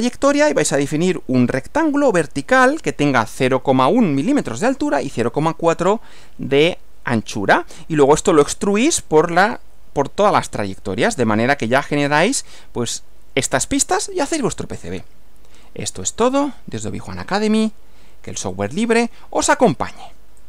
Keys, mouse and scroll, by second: 10.8 Left, 18.6 click.